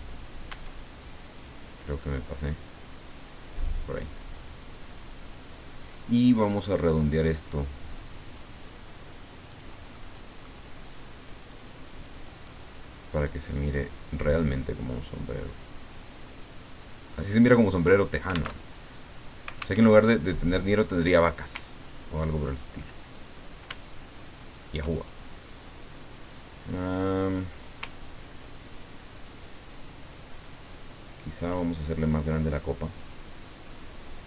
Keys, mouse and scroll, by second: 1.3 click, 2.1-3.6 drag, 4.0-6.1 drag, 9.5 click, 9.9 middle click, 11.5 click, 12.5-17.3 drag, 18.6 alt+Tab, 19.8 alt+Tab, 22.0 ctrl+scroll down 2, 23.1 click, 24.5 shift+click, 26.3 click, 27.9-31.6 ctrl+drag, 32.3-34.2 drag.